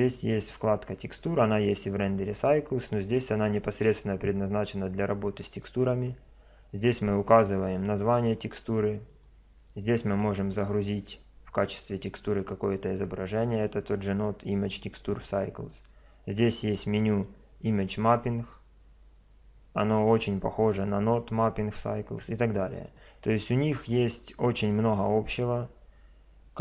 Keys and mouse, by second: 1.0 click, 2.7 click, 9.1 click, 17.1 click, 18.8-22.8 middle drag, 22.8 click, 24.7-26.6 middle drag.